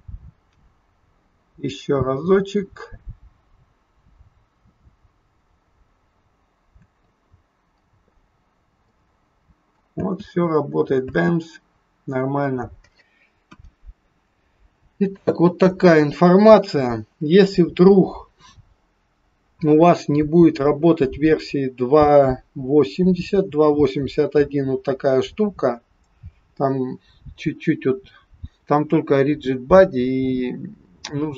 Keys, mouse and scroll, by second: 6.9 space, 8.1-8.8 scroll up 4, 8.8 middle click, 10.0 space, 11.0 space, 11.7-12.1 scroll down 4, 13.4 KP_1, 14.6 scroll up 2, 30.7-31.3 scroll down 1.